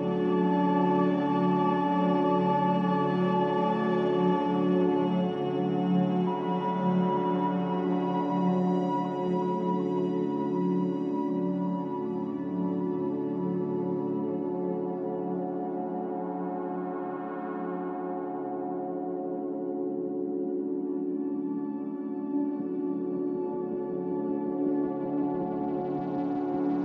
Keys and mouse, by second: 0.1 Tab, 1.1 Tab, 3.3 Tab, 4.3 click, 5.1 click, 5.8 Tab, 7.6 shift+click, 8.8 shift+click, 10.6 shift+click, 12.1 ctrl+click, 13.8 s, 19.7 Tab, 22.1 click, 22.9 click, 23.6 Tab, 25.3 Tab, 25.9 alt+z, 26.3 Tab.